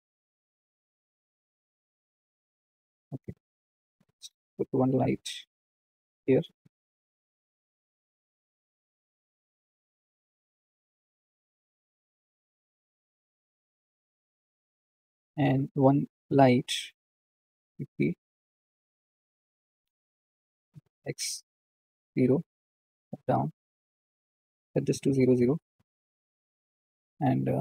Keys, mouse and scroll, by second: 1.2 g, 3.3 click, 4.2 click, 5.2 shift+d, 6.3 r, 8.6 g, 13.7 click, 14.6 click, 15.0-15.7 scroll down 6, 15.8 click, 17.5 shift+d, 20.3 r, 22.5 KP_1, 23.3 g, 26.2-27.6 drag.